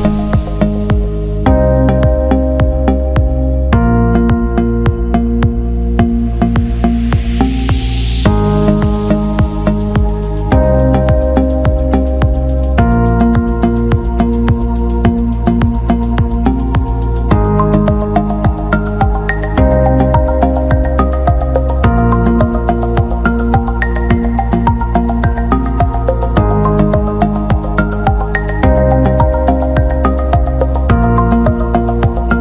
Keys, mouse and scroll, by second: 0.2 alt+shift+middle click, 1.4 click, 2.7 click, 3.5 alt+middle click, 4.0 alt+shift+middle click, 4.4 alt+middle click, 5.2 alt+middle click, 7.9 alt+middle click, 8.8 alt+shift+middle click, 10.9 alt+shift+middle click, 18.2 click, 19.3 click, 20.3 ctrl+z, 23.1-25.7 drag, 27.0 click, 27.4 alt+middle click, 29.1 click, 31.4 alt+middle click.